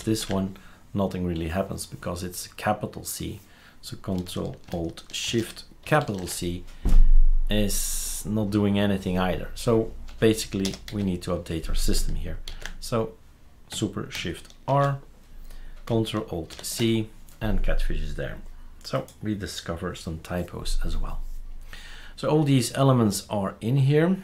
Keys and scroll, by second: 10.7 typing, 17.0 typing.